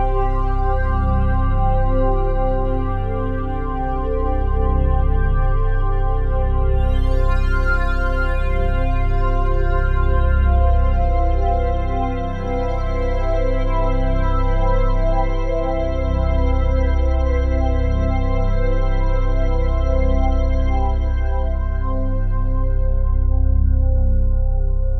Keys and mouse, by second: 0.0 alt+a, 2.9 alt+shift+click, 3.5-5.3 ctrl+alt+drag, 5.6-6.8 ctrl+alt+shift+drag, 6.8 ctrl+s, 7.7-9.1 alt+drag, 9.9-12.2 alt+drag, 12.9-14.8 drag, 16.4 ctrl+s, 17.0 F11, 18.9 click, 19.5 click, 21.2 click, 22.3 F12.